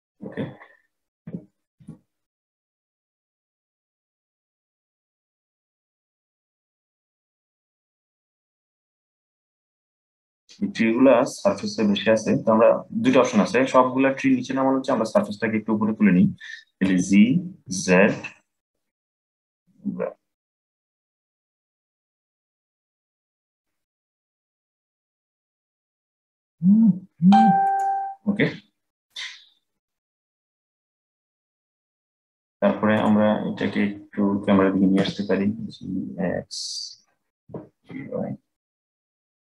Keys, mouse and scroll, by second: 0.9 g, 6.3 click, 9.4 click, 14.8 click, 16.6 g, 30.9 click, 32.7 click, 34.7 g, 37.2 g.